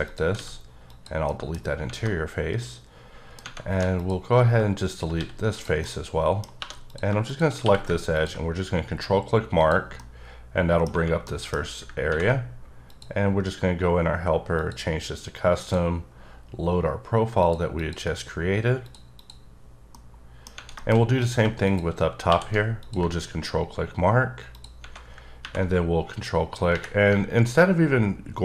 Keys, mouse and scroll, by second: 0.0 click, 0.3 x, 0.9 click, 1.2 middle click, 2.0 middle click, 3.7 3, 3.9 click, 5.1 x, 5.5 click, 5.8 middle click, 6.4 scroll up 2, 6.6 2, 6.9 click, 7.2 click, 7.6 q, 8.1 ctrl+click, 8.9-9.2 scroll up 4, 9.6 click, 9.9 middle click, 11.2 middle click, 12.9 click, 14.5 click, 15.6 click, 17.4 click, 17.7 click, 18.8 click, 19.1 click, 19.9 middle click, 20.4 scroll down 1, 20.8 shift+middle click, 20.9 scroll up 1, 21.2 click, 21.6 click, 22.0 scroll up 2, 22.3 q, 22.8 ctrl+click, 23.6-24.0 scroll up 5, 24.5 click.